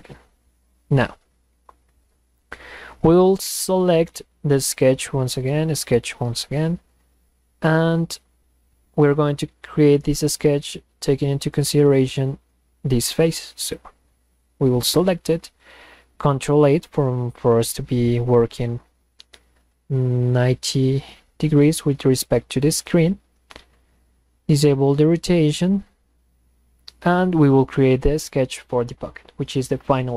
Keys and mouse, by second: 4.8 click, 5.7 click, 13.7 click, 17.0 ctrl+8.